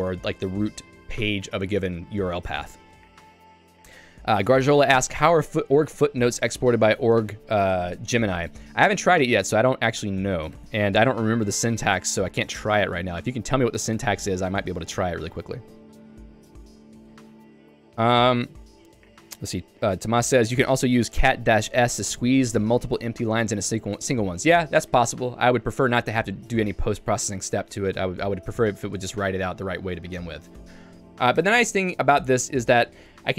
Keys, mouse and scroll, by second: 10.4 ctrl+g, 13.9 Escape, 13.9 Escape, 14.4 k, 30.6 g, 31.4 Escape, 31.5 Escape, 32.6 click.